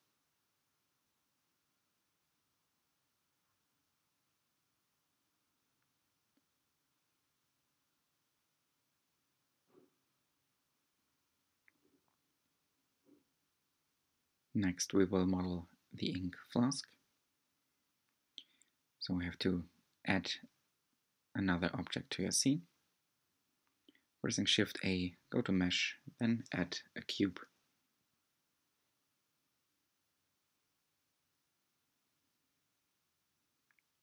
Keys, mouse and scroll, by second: 1.4 r, 6.4 g, 9.0 r, 12.3 r, 16.4-20.3 drag, 20.3 h, 21.1 shift+a, 24.8 g, 26.9-27.5 scroll down 2, 27.5-31.6 middle drag, 31.6 Tab, 32.2-33.5 middle drag, 33.5-34.0 drag.